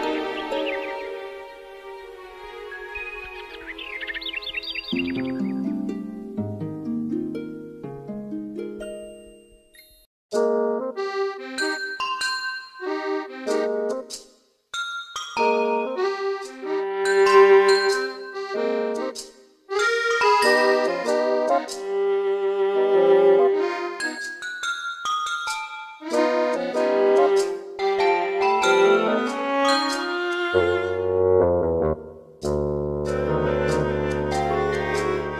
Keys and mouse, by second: 5.5 middle click, 6.5 middle click, 6.9 middle click, 9.0 right click, 16.4 right click, 18.0 middle click, 19.1 middle click, 20.2 right click, 21.3 middle click, 22.4 middle click, 23.8 middle click, 24.2 middle click, 24.8 middle click, 25.2 middle click, 33.0 middle click, 33.8 middle click, 34.8 middle click, 35.2 middle click.